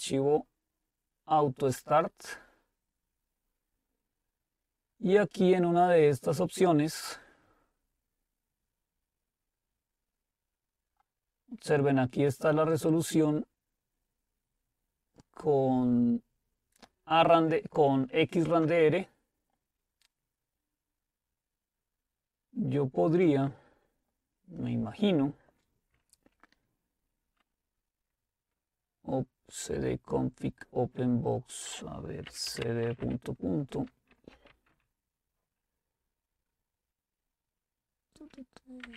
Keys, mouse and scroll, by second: 3.6-4.2 scroll up 2, 4.2-5.2 scroll up 1, 5.2-6.2 scroll up 1, 6.2-7.0 scroll up 1, 9.8-11.2 scroll up 2, 12.9-16.1 drag, 17.7 typing, 19.9-21.0 scroll down 2, 22.2-23.8 scroll down 2, 23.8-26.3 scroll down 2, 32.1-35.0 typing, 38.7-38.9 typing.